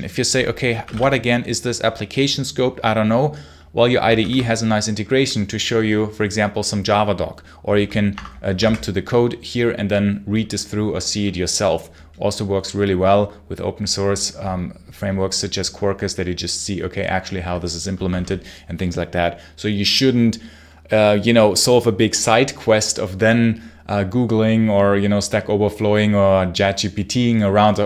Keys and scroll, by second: 0.4-1.3 typing, 4.0 ctrl+q, 8.0 Escape, 8.5 ctrl+b, 17.8 Escape, 17.9 space, 18.0 h.